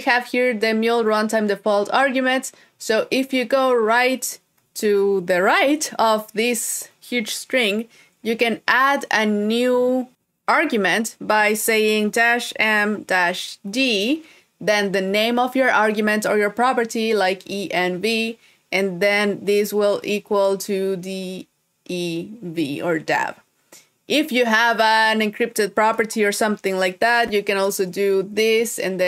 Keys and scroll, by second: 4.3 super+Right.